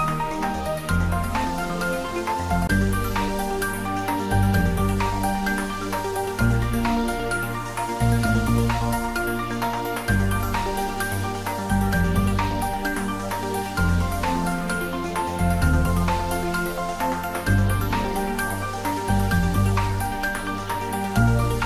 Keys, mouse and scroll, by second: 1.7 ctrl+r, 2.6 click, 3.2 click, 4.9 ctrl+r, 5.8 click, 7.9 ctrl+r, 8.7 click, 11.1 ctrl+r, 12.1 click, 14.7 ctrl+r, 15.4 click, 17.6-19.2 middle drag, 19.2 ctrl+r, 20.0 click.